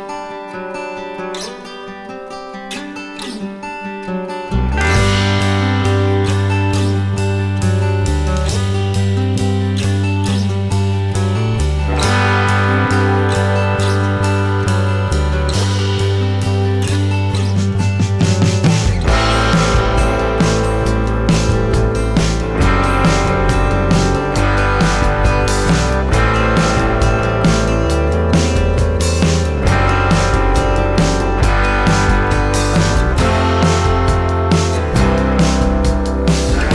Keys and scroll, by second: 16.5 ctrl+alt+s, 23.3 alt+s.